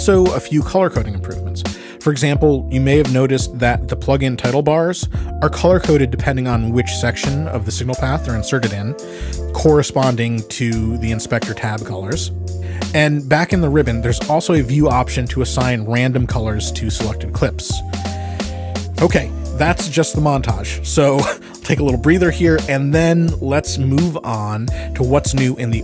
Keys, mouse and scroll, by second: 4.3 click, 7.7 click, 11.4 click, 15.6 click, 17.5 click, 20.9 Escape, 22.9-24.4 ctrl+scroll, 25.6 click.